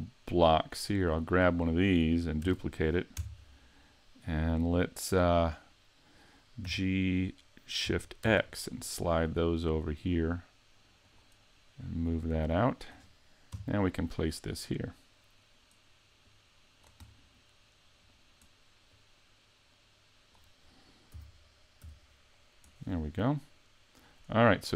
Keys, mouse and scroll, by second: 0.9 right click, 2.5 shift+d, 6.7 g, 11.2 click, 11.8 click, 13.5 KP_Decimal, 14.4-15.0 scroll down 3, 14.9 middle click, 16.3 click, 17.1 middle click, 18.9 click, 21.1 s, 23.4 click, 23.6 click.